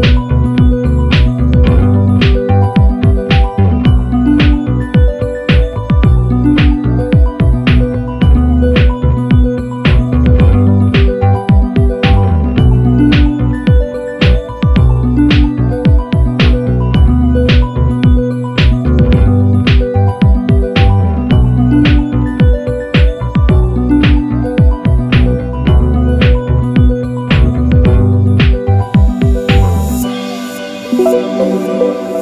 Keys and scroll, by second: 7.4 1, 11.1 super+-, 11.7 super+=, 31.8 1.